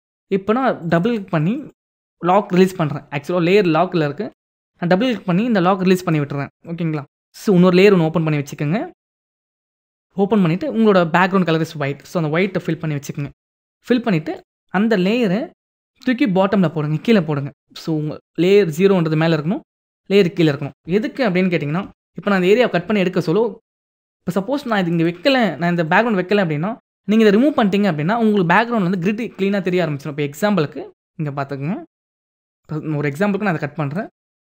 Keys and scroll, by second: 12.8 alt+BackSpace, 21.7 ctrl+=.